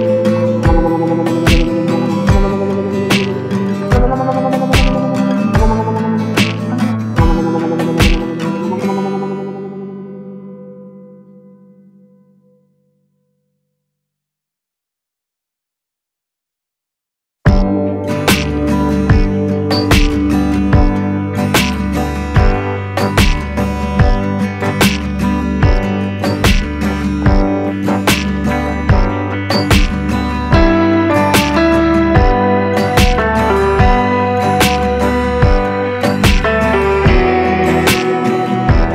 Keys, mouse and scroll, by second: 0.9-5.0 drag, 5.0 click, 7.0 right click, 8.9-20.6 drag, 20.6 click, 24.6-38.9 drag.